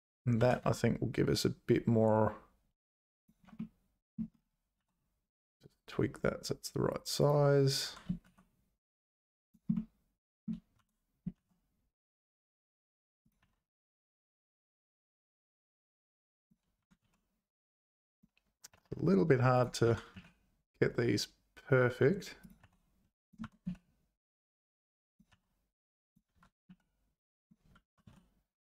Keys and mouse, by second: 0.4 g, 3.5 middle click, 4.8 s, 7.8 g, 9.7 middle click, 10.7 g, 13.4 s, 16.8 g, 18.7 s, 19.8 g, 22.6 s, 23.4 g, 25.3 s, 26.3 g, 27.8 g.